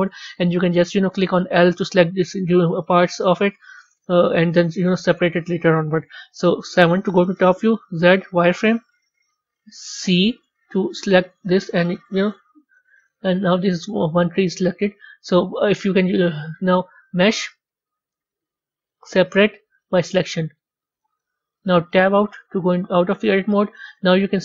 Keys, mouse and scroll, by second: 1.8 2, 2.4 3, 2.9 4, 3.2 6, 5.0-6.2 middle drag, 6.2 KP_7, 13.1-16.1 middle drag, 16.9 click, 21.9 Tab, 22.8 z, 23.9 click.